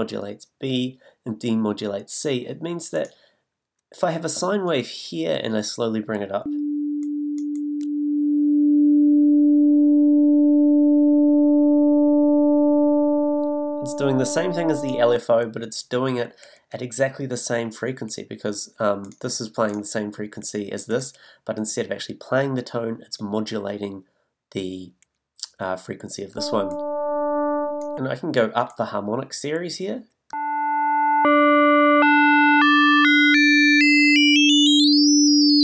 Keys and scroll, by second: 6.4 s, 26.3 s, 30.3 s.